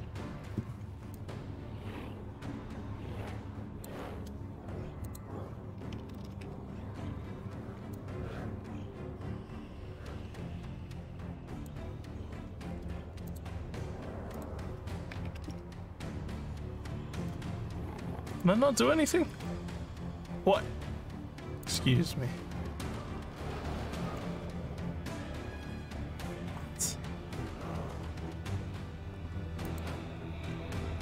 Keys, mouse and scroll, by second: 1.1-3.8 alt+drag, 5.0 click, 7.9-11.6 alt+drag, 12.6 scroll down 2, 13.2 click, 14.3 click, 18.2 click, 21.6 click, 29.6 click, 30.9 scroll down 2.